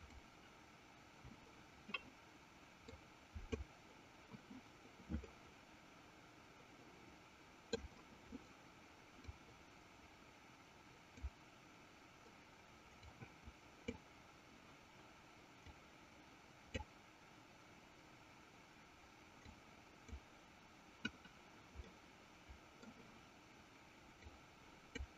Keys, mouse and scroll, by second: 3.3-4.4 drag, 5.4-8.0 middle drag, 9.7-11.8 drag, 13.4-14.6 drag, 16.3 click, 19.8-20.9 drag, 22.2 middle click, 24.7 click.